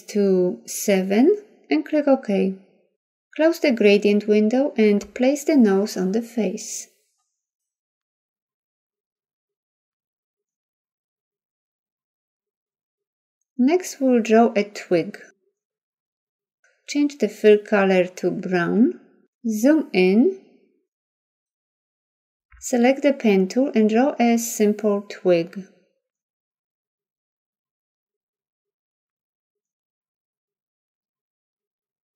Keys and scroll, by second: 15.9 ctrl+0, 19.7 z.